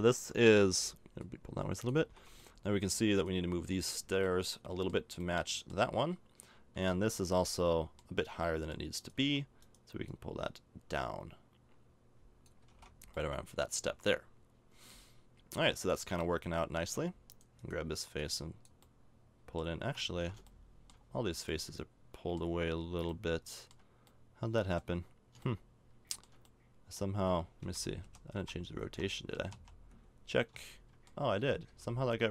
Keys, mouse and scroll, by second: 0.5 l, 2.0 a, 2.1 Tab, 2.6 middle click, 7.1 middle click, 9.2 Tab, 12.6 a, 12.7 Tab, 13.0-14.2 middle drag, 16.8 Tab, 18.2 right click, 18.8 middle click, 20.0 ctrl+z, 20.5 middle click, 20.9 middle click, 21.5 middle click, 22.4 middle click, 23.1 middle click, 24.2 middle click, 24.8 middle click, 25.5 middle click, 25.9 middle click, 26.1 middle click, 26.3-27.7 middle drag, 27.6-29.5 typing, 31.4 z, 31.7 z.